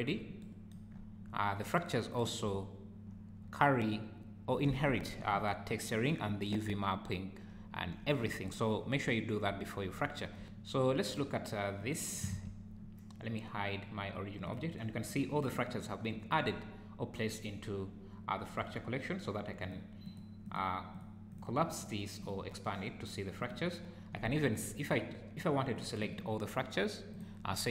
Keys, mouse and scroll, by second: 0.9-1.3 scroll up 5, 1.3 `, 2.5 `, 3.4 `, 5.3 `, 6.2 scroll up 4, 6.7 `, 7.9 `, 9.0 `, 9.5 scroll down 5, 10.0 `, 11.8 click, 12.3 alt+a, 14.5 click, 15.1 click, 19.6 click, 20.1 click, 20.5 click, 21.0 click, 21.3 click, 21.8 click, 22.2 click, 23.4 click, 25.8 click, 27.1 click, 27.5-27.7 scroll down 5.